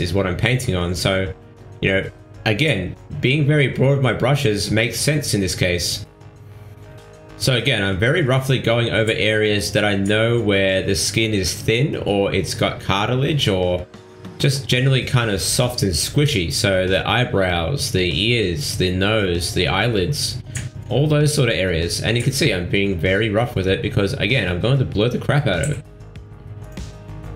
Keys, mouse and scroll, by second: 0.0 middle click, 0.4 shift+middle click, 1.6 click, 4.3 click, 5.8 middle click, 6.4 ctrl+middle click, 6.7 middle click, 8.0 middle click, 8.9 ctrl+middle click, 9.6 middle click, 10.4 click, 15.7 click, 16.0 ctrl+z, 16.0 middle click, 16.7 shift+middle click, 16.9 ctrl+middle click, 17.4 middle click, 18.6 click, 22.8 click, 23.8 click, 24.7 click, 25.1 ctrl+middle click, 25.4 middle click, 26.0 ctrl+middle click, 26.3 middle click, 26.6 shift+middle click, 27.0 middle click.